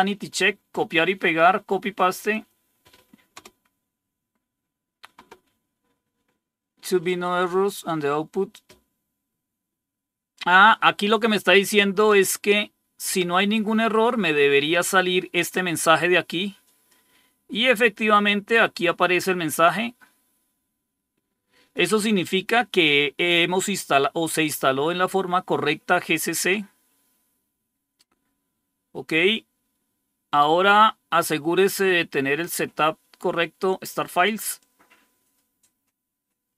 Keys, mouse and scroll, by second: 1.1 right click, 2.2 click, 3.2 Return, 15.4-16.8 drag, 18.5-21.7 drag, 29.8 scroll down 2, 34.5-36.5 drag.